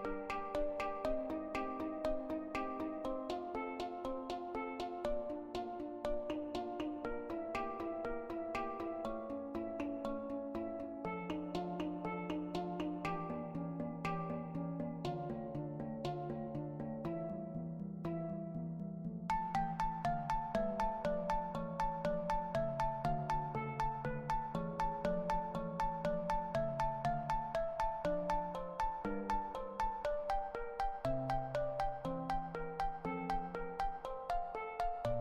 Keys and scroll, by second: 0.0-0.4 typing, 24.7 5, 24.8 Return, 26.8 5.